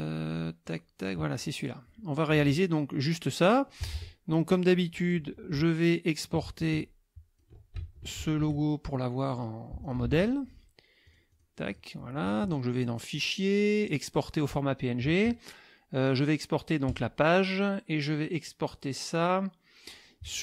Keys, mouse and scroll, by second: 0.6 click, 1.0 click, 1.6 click, 3.8 KP_Subtract, 5.0 click, 6.2-7.6 ctrl+drag, 8.6 ctrl+shift+click, 9.3 click, 9.8 ctrl+shift+click, 10.0 ctrl+shift+a, 11.1 click, 11.7 click, 13.1 click, 13.9 click, 15.4 click, 16.9 click, 19.9 click.